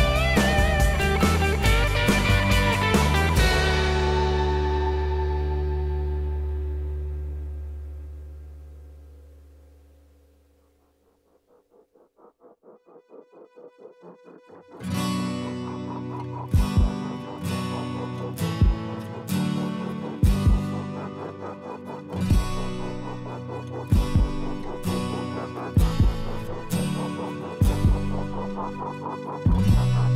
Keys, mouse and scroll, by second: 1.3 m, 14.7 F2, 22.1 m, 25.1 m.